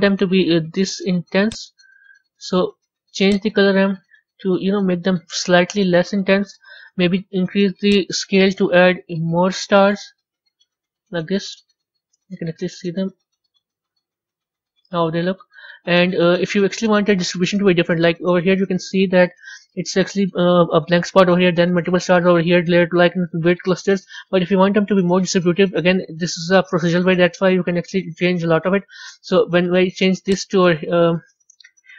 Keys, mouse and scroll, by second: 1.4 click, 3.3-9.9 drag, 9.9 KP_0, 11.7-12.5 middle drag, 12.5 scroll up 3, 13.4-13.8 scroll up 2, 14.0-17.4 middle drag, 17.4-18.7 scroll down 4, 18.7-23.6 middle drag, 23.6 scroll up 4, 24.3-24.7 scroll up 1, 24.7-30.2 middle drag, 30.2 click.